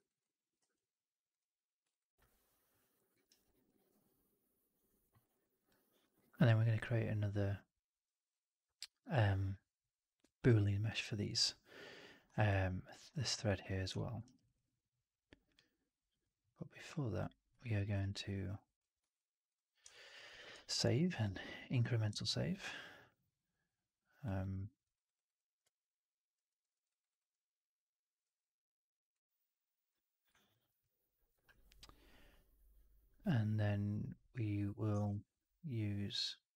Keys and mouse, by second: 0.1-0.4 alt+drag, 0.5 q, 1.8 alt+right drag, 1.9 alt+right drag, 2.1-2.9 alt+drag, 3.0 middle click, 3.2 right drag, 3.3 alt+right drag, 3.5-4.9 alt+drag, 5.1 alt+right drag, 5.3 alt+right drag, 5.5 alt+click, 5.9 alt+click, 12.4-12.9 alt+drag, 13.9 alt+middle click, 14.1 alt+right drag, 14.3 alt+click, 17.1 click, 17.5 alt+middle drag, 17.7 alt+right drag, 17.8 alt+right drag, 18.2 alt+middle drag, 18.9 ctrl+s, 19.8-20.2 alt+middle drag, 20.8 ctrl+s, 22.2-24.1 alt+middle drag, 24.4 alt+middle drag, 24.8 alt+right drag, 25.0 alt+right drag, 25.2-26.2 alt+middle drag, 26.4 alt+middle drag, 26.6 alt+middle drag, 26.8 alt+right drag, 27.0 alt+right drag, 27.2-28.1 alt+middle drag, 34.9 shift+Tab.